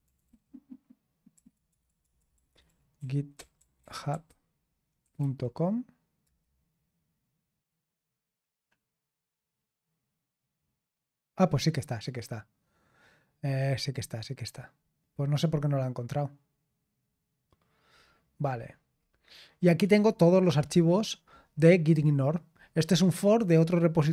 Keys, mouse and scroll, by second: 0.0-5.7 typing, 6.2 Return, 17.8-18.4 scroll down 1, 18.5-19.0 scroll up 2, 19.0-19.4 scroll down 2, 19.9-21.3 scroll down 6, 22.6-24.1 scroll up 2.